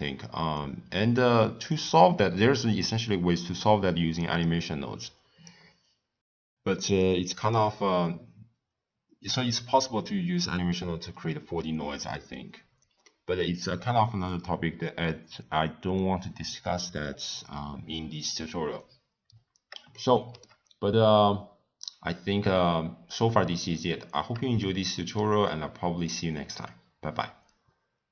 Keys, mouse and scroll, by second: 4.4 click, 6.9-10.0 middle drag, 13.0 scroll up 1, 13.0-16.1 middle drag, 19.9 shift+middle click, 20.6 scroll up 1, 20.8-21.3 scroll down 1, 21.3 scroll down 1, 21.4-22.2 scroll up 6, 22.2 scroll down 1, 22.2 scroll up 1, 22.2-22.6 scroll down 2, 22.6 scroll up 1, 22.7 scroll down 1, 22.7 scroll up 1, 23.0 scroll down 2, 23.5 scroll up 1, 23.6-24.2 scroll down 6, 24.6-27.6 middle drag.